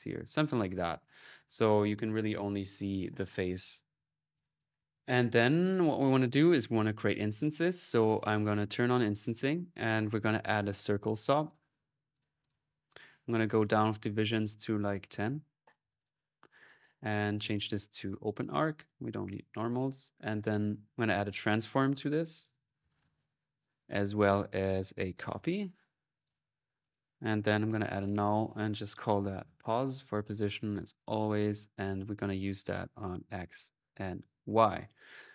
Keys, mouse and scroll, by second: 4.1 click, 4.8 click, 5.9 click, 7.1 click, 7.9 click, 8.4 click, 9.4-10.6 drag, 11.3-12.6 drag, 12.4 middle click, 13.5 click, 17.2-18.6 drag, 19.1-20.5 drag, 20.4-23.9 typing, 20.6-21.8 ctrl+drag, 21.2 right click, 22.4-23.4 right drag, 23.8 right click, 24.9-25.7 typing, 26.0-27.6 drag, 27.6 alt+n, 28.2 alt+click, 28.9 alt+n, 30.2 click, 31.7-35.3 drag.